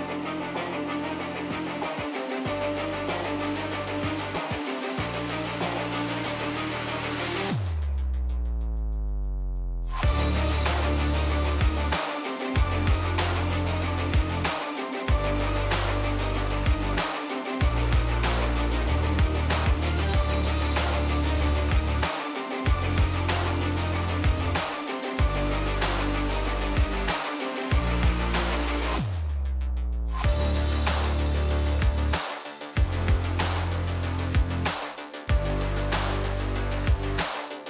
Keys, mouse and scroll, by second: 10.4 click, 11.2 middle click, 11.4 r, 12.7 middle click, 12.9-13.9 drag, 13.9 middle click, 14.1-15.9 drag, 15.9 middle click, 17.3 middle click, 18.6 middle click, 18.8-19.8 drag, 19.8-21.3 middle drag, 20.0 r.